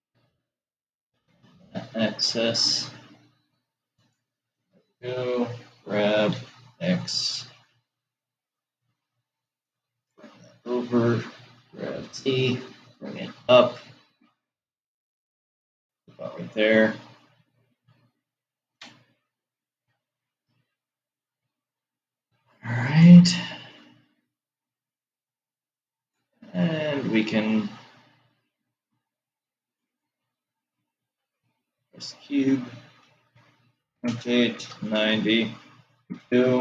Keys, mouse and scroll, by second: 5.7 g, 11.6 g, 23.1-26.8 drag, 33.4 r.